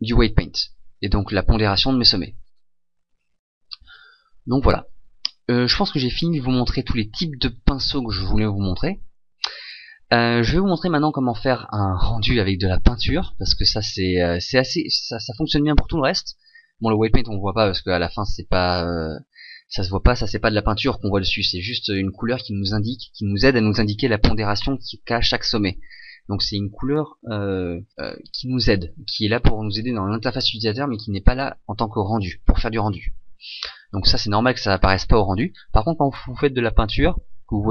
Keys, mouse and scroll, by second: 7.6 right click.